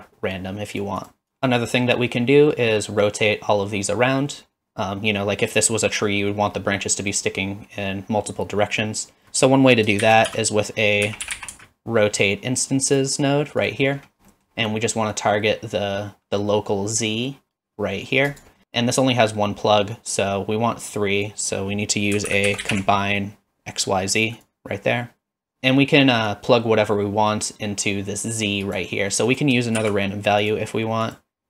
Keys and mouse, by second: 9.2 shift+a, 10.0 shift+a, 14.4 middle click, 15.2-18.4 drag, 20.1-24.5 drag, 26.4-28.8 drag, 29.8 shift+d, 31.2-31.4 drag.